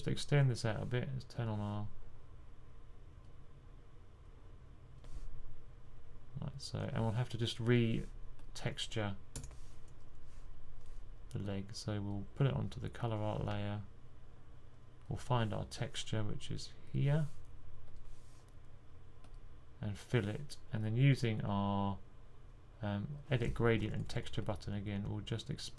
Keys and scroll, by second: 23.8 typing.